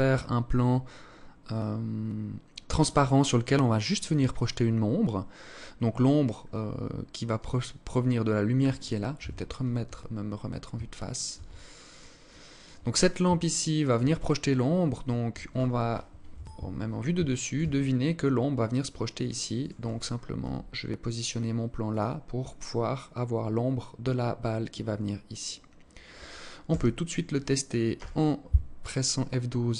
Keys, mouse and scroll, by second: 6.8 right click, 8.7 KP_1, 9.5 scroll up 5, 10.4 alt+shift+click, 11.1 alt+click, 11.7 alt+click, 12.9 alt+shift+click, 15.8 KP_7, 16.9 alt+shift+click, 17.2 scroll down 1, 18.2 scroll down 5, 19.1 right click, 19.9 g, 26.2 KP_0.